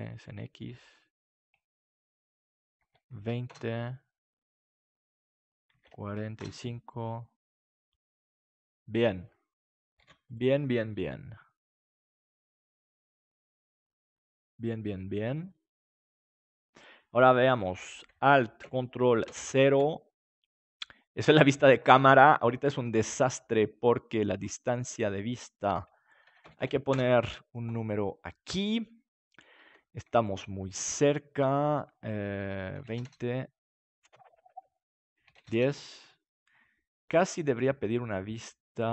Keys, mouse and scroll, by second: 2.0-3.5 drag, 5.4-6.5 drag, 6.7 click, 9.9 ctrl+s, 19.3 ctrl+alt+KP_0, 24.2-27.9 drag, 26.5 KP_4, 30.2-32.7 drag, 35.0-36.9 drag.